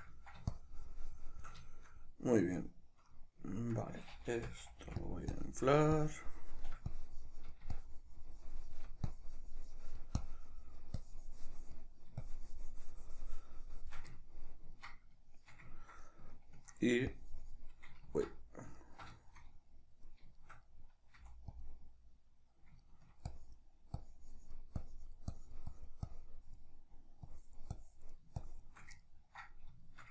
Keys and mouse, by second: 0.5-1.7 shift+drag, 1.7-5.4 shift+middle drag, 4.4 typing, 5.4-14.2 drag, 14.2-17.2 ctrl+middle drag, 17.2-18.8 drag, 18.3 ctrl+z, 18.8-21.6 ctrl+middle drag, 21.2 f, 21.6 click, 22.8 ctrl+middle click, 23.3-29.1 drag, 29.1-30.1 ctrl+middle drag.